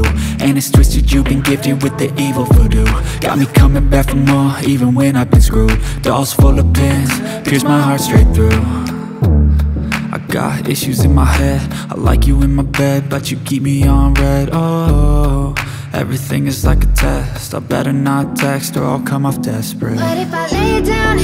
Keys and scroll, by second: 1.3 Escape, 1.7 F4, 2.1 F2, 9.3 space, 14.4 F4, 15.5 F3, 17.1 c, 17.2 e, 18.6 shift+Page_Up, 20.8 ctrl+z.